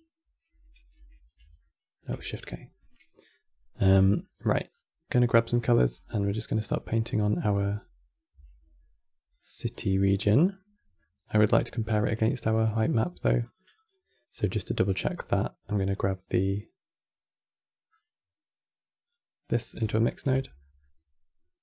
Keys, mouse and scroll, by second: 0.6 ctrl+k, 1.3 middle click, 2.0 shift+k, 2.4-4.4 middle drag, 4.4-5.6 scroll down 3, 5.6 scroll down 6, 5.8-8.0 middle drag, 8.0 e, 9.4 scroll down 3, 9.6 middle click, 10.1-10.4 scroll up 2, 10.4-11.4 middle drag, 11.4 q, 17.6 click, 19.2-19.9 middle drag, 19.9 ctrl+shift+click, 20.3-21.6 middle drag.